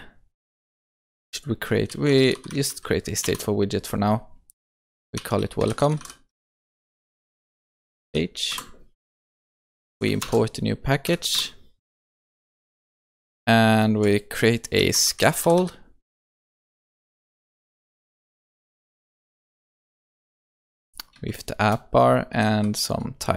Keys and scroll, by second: 3.3 Return, 10.2 alt+Return, 16.5 Return.